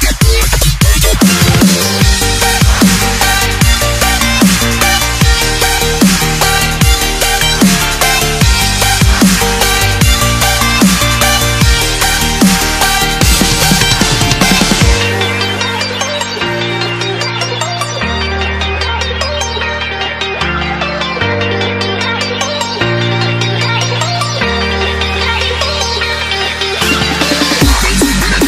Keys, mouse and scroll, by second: 14.4 s, 22.5 click.